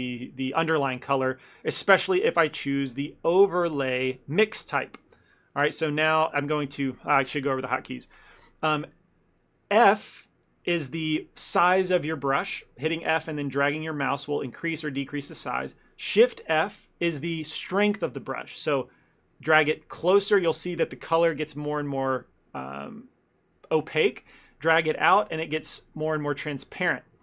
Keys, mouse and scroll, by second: 2.1 click, 5.2 shift+f, 6.3 ctrl+middle click, 6.8 shift+f, 8.5 ctrl+middle click, 9.8 f, 16.5 shift+f.